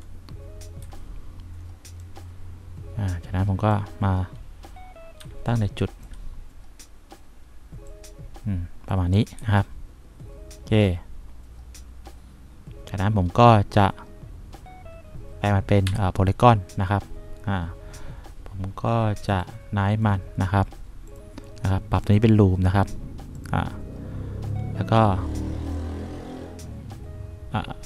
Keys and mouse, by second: 0.0 F1, 1.0 F3, 5.4 1, 8.4 click, 9.6 F1, 16.1 c.